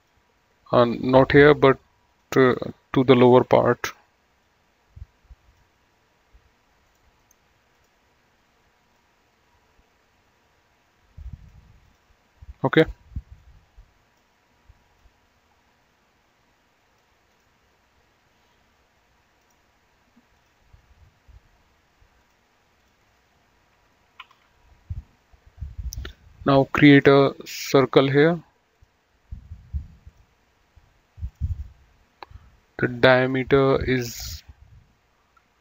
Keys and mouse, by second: 2.5 click, 4.6 click, 7.2 click, 7.5 right click, 8.0 click, 12.1 click, 13.6 click, 15.3 click, 17.7 click, 19.6 click, 22.5 click, 24.5 typing, 27.2 click, 29.0 click, 33.5 click.